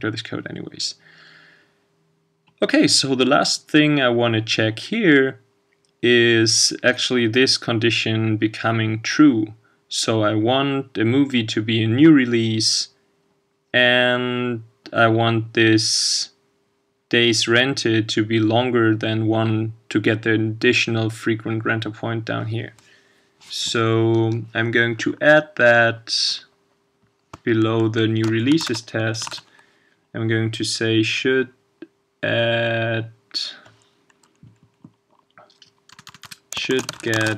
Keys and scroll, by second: 28.6 shift+super+c, 29.3 super+v.